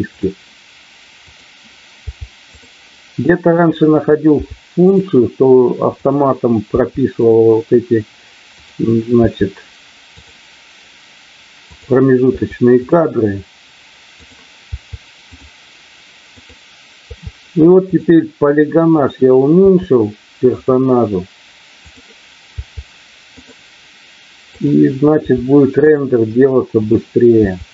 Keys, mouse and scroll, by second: 1.1 click, 3.5 click, 4.3 i, 5.9 click, 6.6 i, 8.5 click, 11.7 click, 14.1 click, 15.4 i, 16.3 click, 18.9 click, 19.6 i, 22.4 i, 24.5 click, 25.0 i, 26.8 click, 27.4 i.